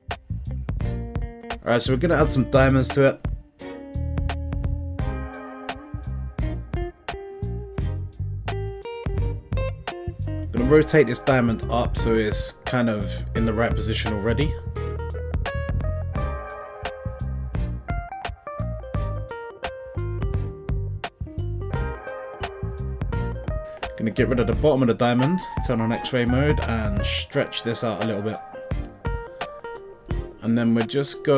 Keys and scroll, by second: 10.4 r, 11.3 x, 11.8 9, 12.0 0, 12.6 Return, 14.6 s, 17.9 s, 24.3 Tab, 26.4 x, 30.4 e.